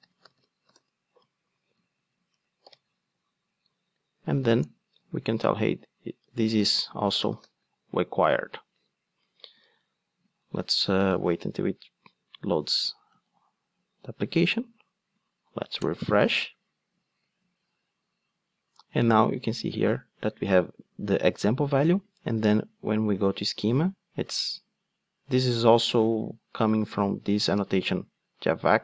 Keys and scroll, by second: 6.2 Return.